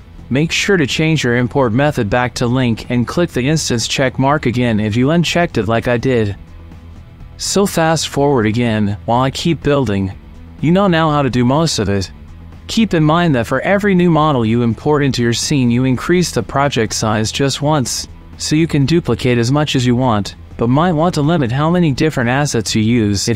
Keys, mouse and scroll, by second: 0.0 middle click, 1.6-2.9 drag, 4.0-5.2 drag, 5.8 click, 7.1 middle click, 7.4 alt+g, 7.6 alt+g, 7.9 middle click, 8.0-11.3 typing, 8.1 KP_Subtract, 8.5 click, 8.7 click, 9.0 alt+d, 9.5 click, 9.8 alt+d, 9.9 click, 10.2 shift+click, 10.4 alt+d, 10.6 click, 10.7 ctrl+z, 10.8 ctrl+z, 10.9 alt+d, 11.1 click, 11.6 click, 12.4 alt+g, 12.5 r, 12.5 z, 12.5 KP_Enter, 12.5 KP_9, 12.5 KP_0, 12.6 click, 12.8 click, 12.9 middle click, 12.9 right click, 13.2 click, 13.4 click, 13.5 shift+middle click, 13.6 click, 13.9 middle click, 13.9 click, 14.0 middle click, 14.0 click, 14.9 alt+g, 14.9 shift+click, 15.0-16.6 typing, 15.0 KP_Enter, 15.8 click, 16.2 click, 16.3 click, 16.5 click, 16.8 click, 17.6 alt+g, 17.7-20.3 typing, 17.8 right click, 18.1 middle click, 18.8 shift+click, 19.6 click, 19.7 alt+d, 20.9 middle click, 20.9 shift+click, 21.2 Delete, 21.3 Delete, 21.3 click, 21.4 alt+d, 21.7 g, 22.1 g, 22.3 middle click, 22.6 alt+d, 22.8 g, 23.1 middle click, 23.3 alt+d.